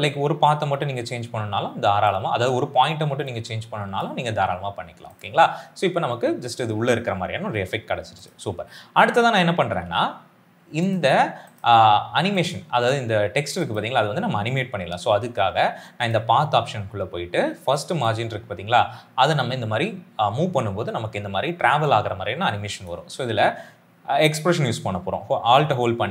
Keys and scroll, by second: 9.5 s, 9.7 s.